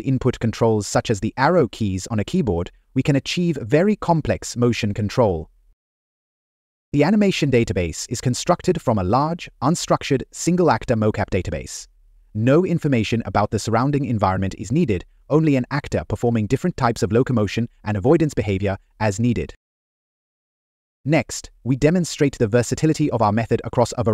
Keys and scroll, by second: 4.6 Left, 6.4 Up, 21.4 Up, 22.2 Left.